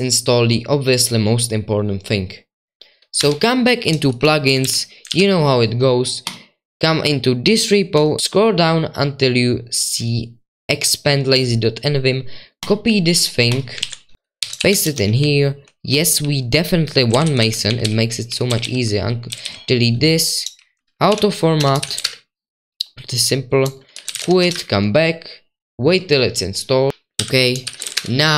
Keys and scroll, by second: 4.8-5.6 typing, 13.8 super+2, 14.1 ctrl+v, 14.1-17.2 typing, 14.6 ctrl+v, 14.8 Escape, 19.2-25.0 typing.